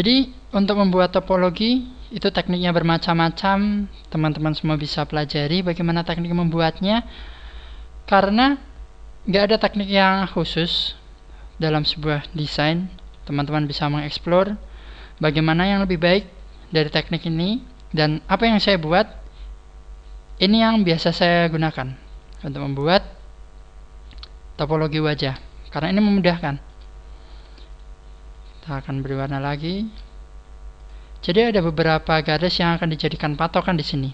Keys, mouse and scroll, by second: 0.0 shift+middle click, 0.9-1.5 scroll up 7, 2.9 right click, 3.3 h, 9.8 ctrl+z, 11.6 right click, 13.0 g, 15.0 click, 15.1 click, 15.1 g, 15.9 click, 16.3-17.5 scroll down 6, 19.6-20.3 scroll up 2, 20.3 shift+right click, 20.3 scroll up 2, 21.3 click, 22.9 right click, 24.1 click, 26.4 shift+middle click, 27.3 right click, 27.7 shift+right click, 28.5 shift+right click, 28.7 shift+right click, 29.3 shift+right click, 30.7 shift+right click, 30.7 click, 31.4 click, 32.1 right click, 32.5 shift+right click, 33.0 shift+right click, 33.3 shift+right click.